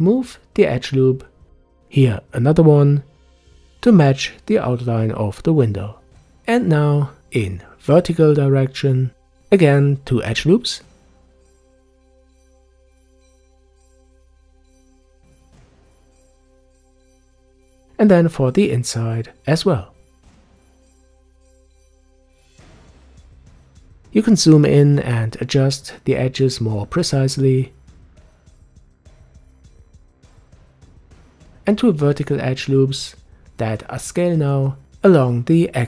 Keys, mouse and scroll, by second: 0.6 ctrl+r, 6.4 ctrl+r, 14.8 ctrl+r, 17.4 ctrl+r, 21.4 ctrl+r, 24.3-25.6 scroll up 4, 25.6 click, 27.2-28.6 scroll down 1, 28.6-30.4 shift+middle drag, 30.5 ctrl+r.